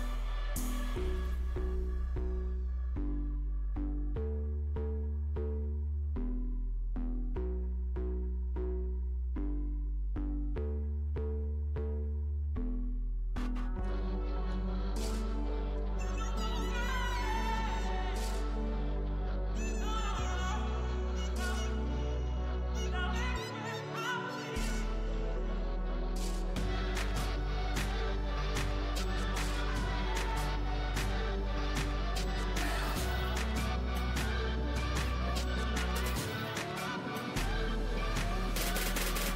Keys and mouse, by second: 0.3 z, 1.5 z, 2.3 z, 4.2 KP_1, 6.4 g, 8.2 z, 9.9 g, 10.4 z, 11.7 z, 15.2 z, 15.5 Tab, 15.9 a, 16.9 a, 17.7 Tab, 18.4 Tab, 19.1 Tab, 19.5-21.4 typing, 25.6 KP_1, 26.1 z, 31.8 ctrl+r, 34.7 z, 36.0 ctrl+r, 38.1 z, 38.6 ctrl+r.